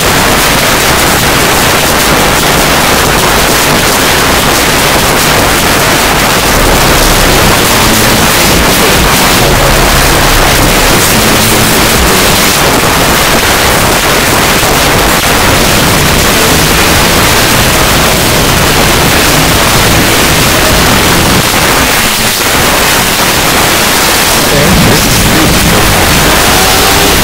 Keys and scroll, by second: 1.0 p, 1.1-2.1 Up, 2.3 Up, 2.5 Up, 2.7 Return, 12.5 Page_Down, 21.4 Page_Down.